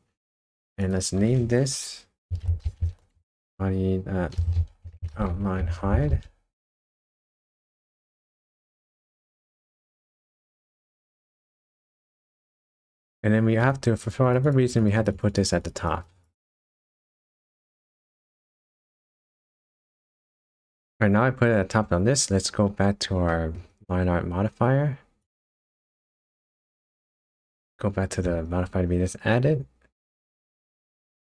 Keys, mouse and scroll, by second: 0.7 click, 0.8 click, 9.8 Tab, 10.6 middle click, 11.5 scroll up 1, 11.8-12.9 scroll down 1, 13.6 click, 14.0 click, 14.3 click, 14.5 click, 14.7 click, 14.8 click, 15.1 click, 15.2 click, 15.4 click, 15.5 click, 15.6 click, 15.8 click, 16.1 click, 16.2 click, 16.4 click, 17.4-17.8 click, 17.5 click, 18.2 click, 18.4 click, 18.9 click, 19.6 click, 22.8 scroll down 2, 23.3 middle click, 23.7 scroll up 1, 25.2 click, 28.6 click, 28.6-30.3 scroll down 7.